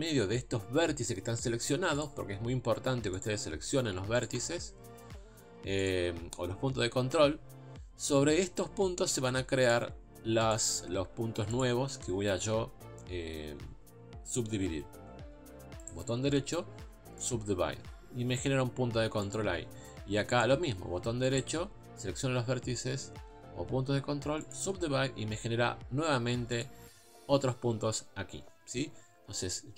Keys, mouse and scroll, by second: 2.0 click, 3.2 click, 4.2 shift+click, 5.9 shift+click, 9.7 click, 10.5 click, 11.6 shift+click, 17.3-19.3 right drag, 19.3 click, 20.4 shift+click, 26.6 click.